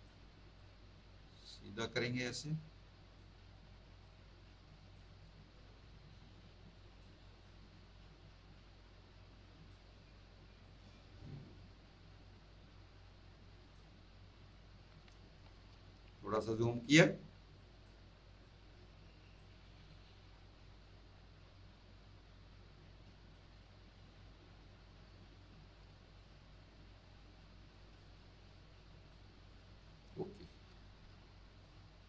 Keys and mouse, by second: 0.5 click, 2.2 click, 4.0 click, 10.6 click, 15.7 ctrl++, 17.5 click, 18.4 click, 19.8 click, 27.9 click.